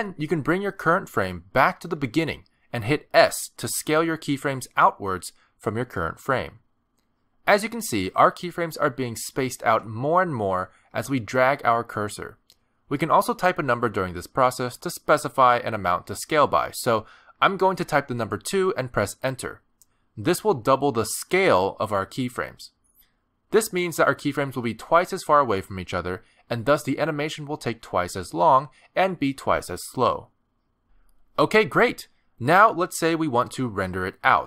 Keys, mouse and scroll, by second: 0.4 click, 4.2 s, 28.4 space.